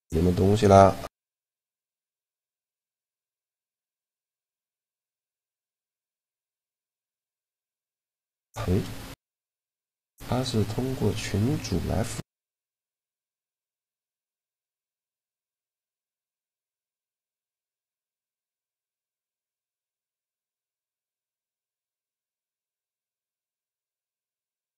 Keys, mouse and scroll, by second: 3.4 click, 3.7-9.0 middle drag, 13.1-15.3 right drag, 14.8 g, 15.1 click, 15.3 middle click, 17.1-18.9 right drag, 17.7 g, 20.1-21.3 drag, 22.5-23.7 drag, 23.7 shift+l.